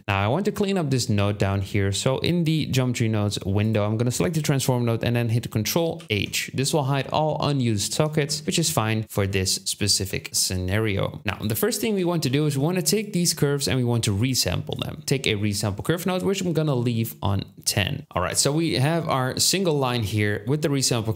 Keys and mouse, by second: 0.0-0.7 drag, 5.9 ctrl+h, 6.3-8.5 drag, 9.6-10.6 ctrl+drag, 9.6-10.6 ctrl+middle drag, 9.6-10.6 ctrl+right drag, 11.2 shift+a, 14.2-14.8 drag, 18.0 Tab, 18.0 x.